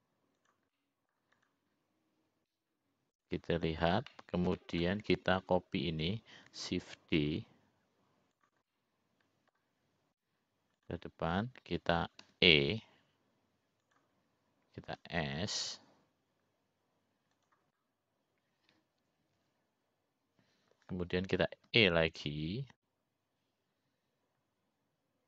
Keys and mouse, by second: 0.2 middle click, 1.3 s, 2.6 middle click, 3.2 click, 6.0 middle click, 7.2 click, 9.2 shift+d, 10.7 middle click, 14.3 e, 17.0 5, 23.8 e.